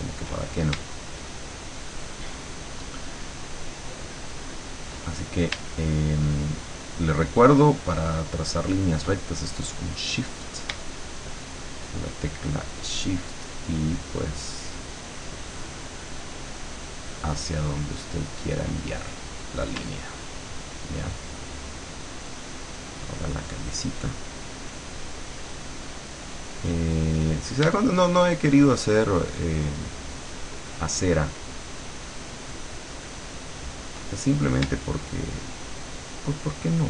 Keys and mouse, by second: 1.8-4.8 shift+drag, 6.5-8.8 shift+drag, 12.0 shift+click, 13.8-18.5 shift+drag, 22.0-26.4 shift+drag, 26.8 shift+click, 30.1-33.8 shift+drag, 35.5-36.8 shift+drag.